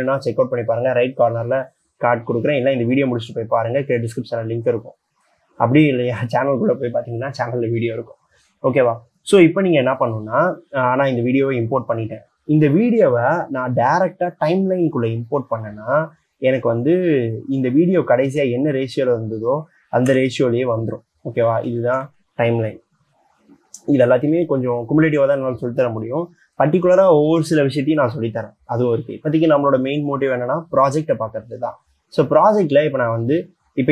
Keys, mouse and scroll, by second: 20.3 c.